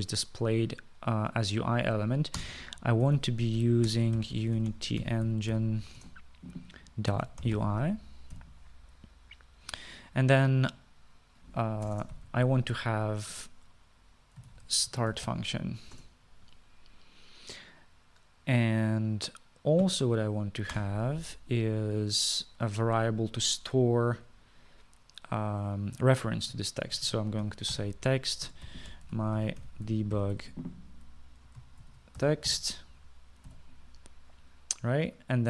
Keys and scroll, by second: 3.5 Return, 3.9-9.4 typing, 13.0 Return, 13.0 Return, 13.2 Up, 13.3 Up, 15.3-16.8 typing, 17.0 Return, 21.8 Return, 27.7-34.6 typing.